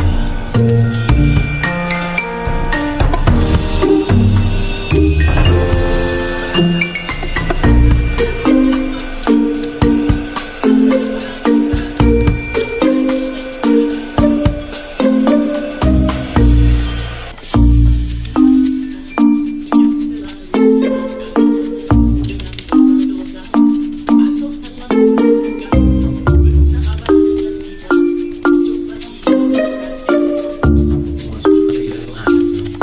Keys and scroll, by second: 14.5 v, 16.4-17.2 typing, 23.2 Delete, 27.7 a, 28.7-29.5 typing, 32.0 Delete.